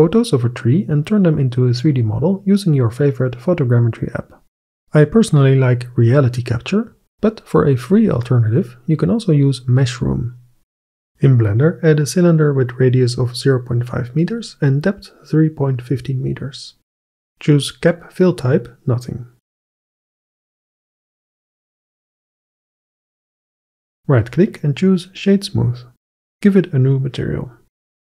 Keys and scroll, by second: 11.5 shift+a, 19.6 s.